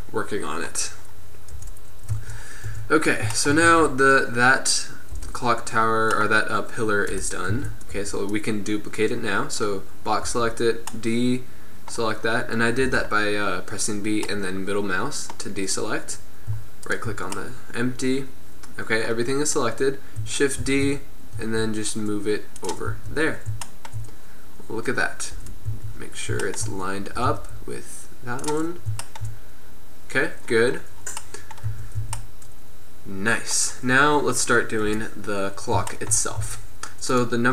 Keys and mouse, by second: 1.1 middle click, 1.6 KP_1, 2.2 z, 2.8 Tab, 3.8 Tab, 5.2 KP_7, 7.2 KP_7, 7.6 a, 8.0 b, 10.3 b, 12.9 b, 16.9-18.9 right drag, 20.7 shift+d, 22.9 z, 25.4 KP_7, 25.8 z, 27.2 g, 31.8 z, 32.0 a, 34.9 KP_1, 36.2 middle click, 36.5 z.